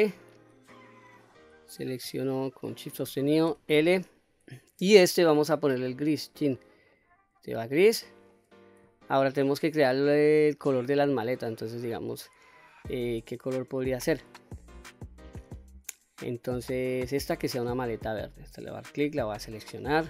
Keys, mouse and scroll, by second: 0.3-1.9 middle drag, 2.4 shift+click, 3.6 l, 5.5 click, 6.4 click, 7.0 middle click, 8.1 middle click, 9.1 shift+middle click, 13.3 click, 18.4 click, 19.5 l.